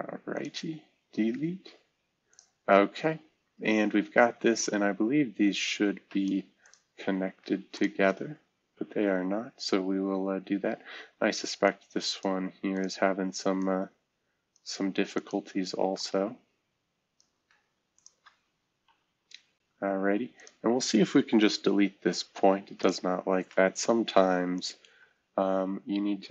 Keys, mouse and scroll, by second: 1.1 Delete, 2.7-3.6 scroll down 1, 3.6-4.6 scroll up 1, 9.1 c, 18.8 c, 21.4 Delete, 25.8 typing.